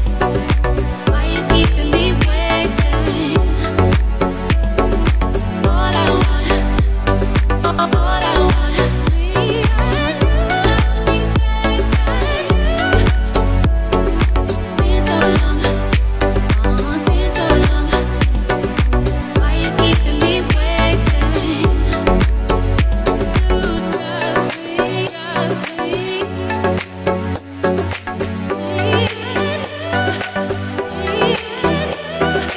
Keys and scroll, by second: 9.2 ctrl+j, 12.9 ctrl+t, 30.8 2, 32.0 Return.